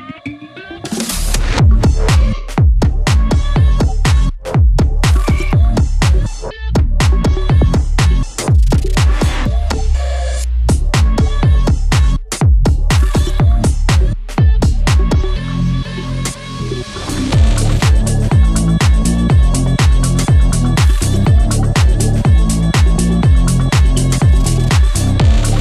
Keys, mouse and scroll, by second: 4.7 scroll up 1, 5.3 scroll down 1, 5.6 scroll up 1, 7.7-8.6 scroll up 1, 8.9 click, 10.4 click, 13.5 click, 13.8-14.4 scroll up 1, 14.4 click, 16.9-17.4 scroll up 1, 17.4-19.3 drag, 19.8 click, 20.5 scroll down 1, 20.8-21.3 scroll up 1, 21.3 click, 22.2 scroll down 1, 22.5-22.9 scroll up 1, 22.9-24.9 drag, 24.9 scroll down 1, 25.3-25.6 scroll up 1.